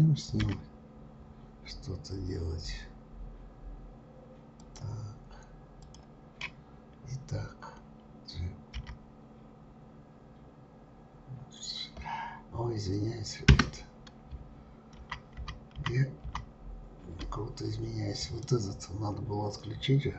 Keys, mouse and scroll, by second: 0.4 g, 5.8 click, 8.7 g, 15.0 ctrl+z, 15.3 ctrl+z, 16.2 ctrl+z, 18.2 click.